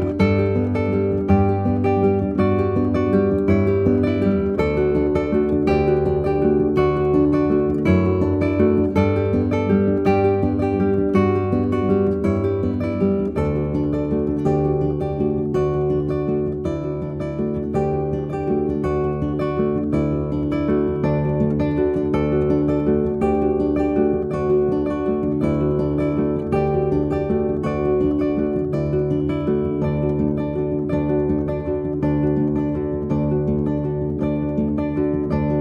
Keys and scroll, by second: 34.6 b.